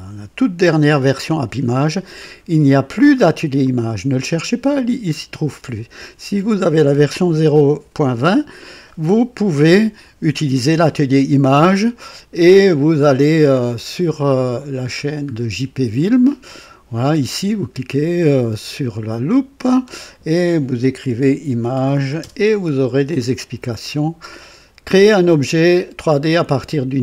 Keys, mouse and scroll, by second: 3.6 click, 5.4 click, 12.3 click, 14.9 middle click, 19.2 click, 20.6-22.4 typing, 23.4 scroll down 1, 23.6 typing.